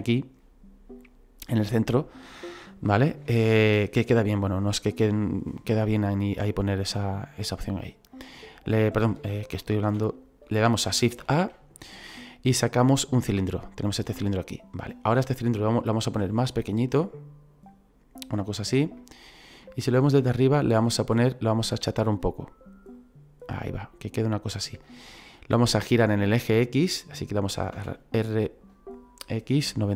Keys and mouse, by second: 3.5 shift+a, 7.3 click, 9.9 ctrl+z, 11.2 shift+a, 13.3 click, 16.1 s, 18.5 click, 19.0 middle click, 19.6 shift+middle click, 21.2 click, 23.0 click, 27.8 r, 29.6 x.